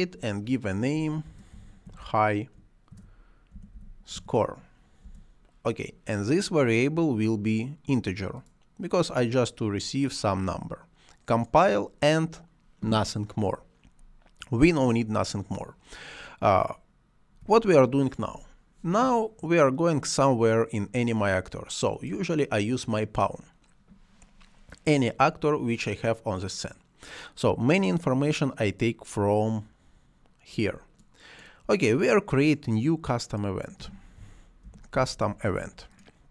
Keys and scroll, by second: 0.9-4.5 typing, 4.9 Return, 33.4-35.3 typing.